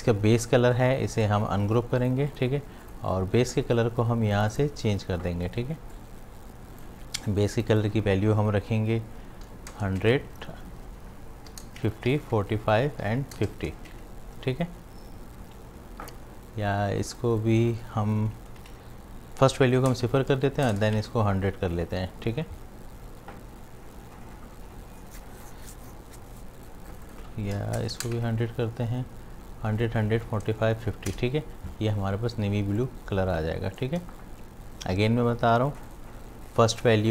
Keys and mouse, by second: 1.2 right click, 2.0-7.6 drag, 10.0 Tab, 17.2 click, 18.7 shift+Tab, 20.0 Tab, 26.4 click, 28.2 Tab, 32.6 space, 32.8 click, 33.2 space, 35.7 click.